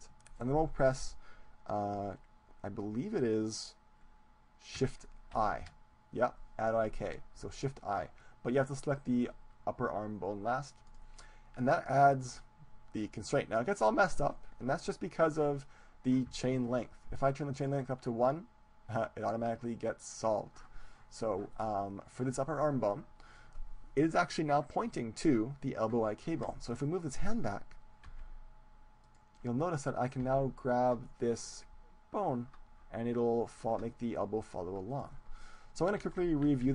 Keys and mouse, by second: 5.4 shift+i, 14.7-17.5 middle drag, 17.5-19.5 drag, 21.5-24.7 middle drag, 26.9-28.7 right drag, 28.4 g, 29.1 click, 29.8-31.7 middle drag, 31.7 g, 35.2-36.7 drag, 36.0 ctrl+z, 36.5 ctrl+z.